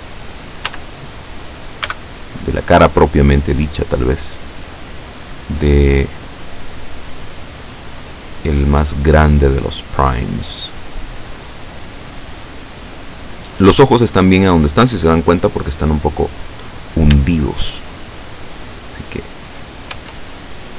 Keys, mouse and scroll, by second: 0.7 a, 1.9 b, 3.2-6.9 drag, 7.7-10.4 drag, 11.4-12.0 scroll up 2, 16.8 scroll down 1, 18.0-18.3 shift+scroll down 3, 19.2-19.5 scroll down 2, 20.0 Tab.